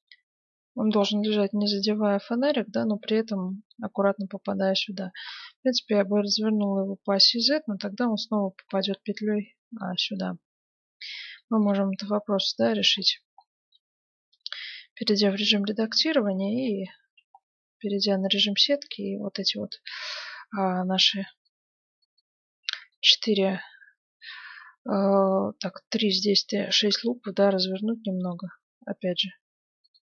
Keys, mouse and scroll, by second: 5.1 r, 8.6-16.0 middle drag, 14.2 Tab, 15.3 KP_7, 16.9 z, 17.5-20.2 middle drag, 18.4 a, 18.8 b, 21.1 b, 22.0 b, 22.9-24.9 middle drag, 26.9 r, 30.0 g.